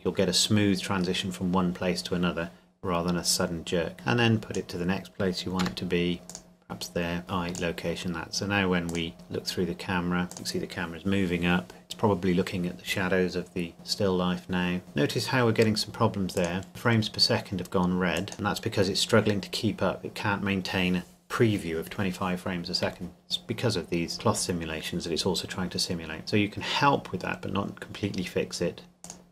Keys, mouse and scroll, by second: 3.9 click, 5.6 g, 6.3 click, 7.6 click, 9.1-10.3 scroll up 1, 10.3 click, 16.4 click, 18.3 click, 29.0 click.